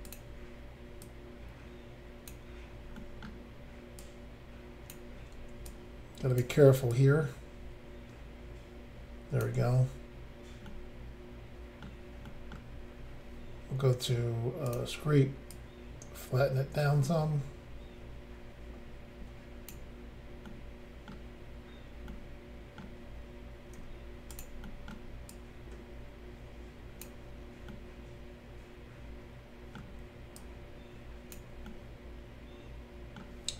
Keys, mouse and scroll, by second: 0.0 click, 0.1 click, 1.0 click, 3.0 middle click, 3.3 scroll up 1, 4.0 click, 5.7 shift+click, 6.9 click, 10.7 middle click, 12.3 middle click, 14.7 click, 14.7 click, 15.6 click, 20.5 middle click, 21.6-22.1 scroll down 1, 22.1 middle click, 23.8 f, 24.4 click, 24.7 middle click, 25.3 click, 27.7 middle click, 30.4 click, 31.7 middle click.